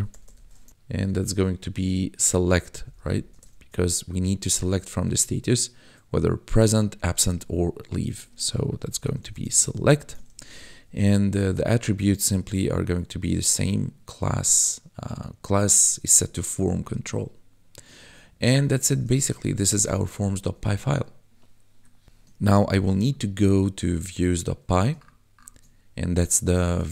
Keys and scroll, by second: 0.0-0.2 typing, 0.7 ctrl+Right, 2.4 Right, 2.7 Left, 3.2 ctrl+shift+Left, 8.7 s, 9.0 e, 9.7 t, 10.2 ctrl+s, 10.4 Right, 12.2 ctrl+Right, 18.0 ctrl+s, 18.4 Down, 18.8 BackSpace, 20.3 ctrl+s, 22.5 ctrl+b.